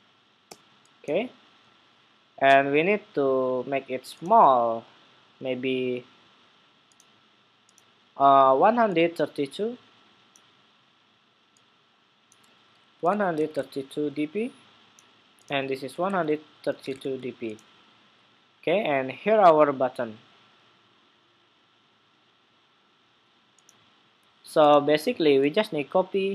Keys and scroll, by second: 25.5 super+c.